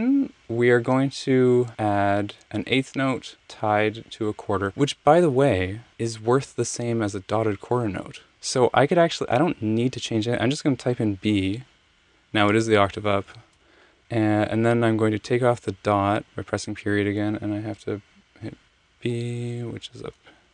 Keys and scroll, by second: 11.5 b, 13.4 alt+super+Page_Down, 19.2 b.